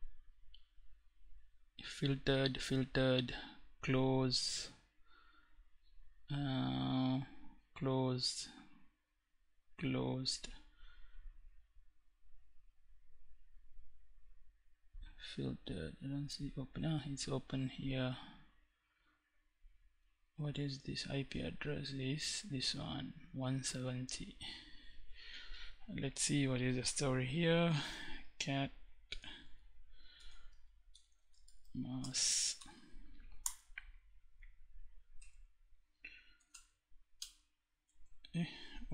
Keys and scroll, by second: 26.9-27.8 typing, 28.8-31.9 typing, 32.8 Tab, 34.5 Tab, 35.7 p, 35.9 Tab, 36.5 Return.